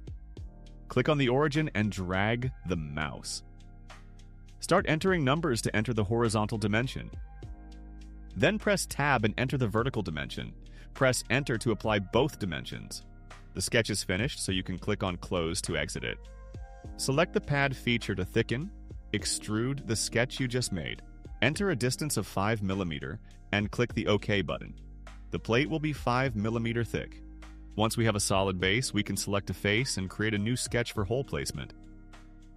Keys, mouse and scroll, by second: 0.4 click, 1.8 click, 5.6 8, 6.0 0, 7.7 Tab, 9.1 3, 9.8 0, 11.6 Return, 14.6 click, 18.6 click, 21.1 5, 24.3 click, 27.6 click, 31.6 click.